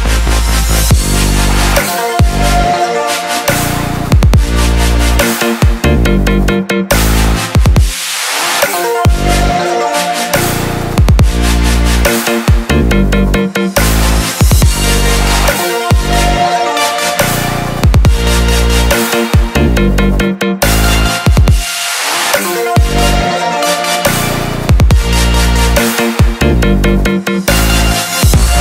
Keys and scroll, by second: 17.6 ctrl+=, 18.4 ctrl+=.